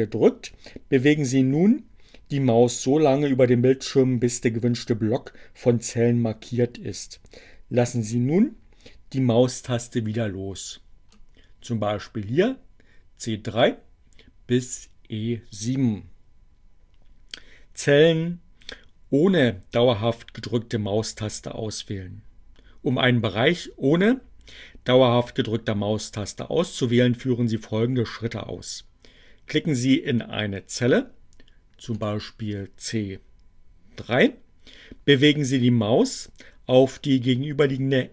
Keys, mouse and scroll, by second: 7.1-9.6 drag, 30.5 click.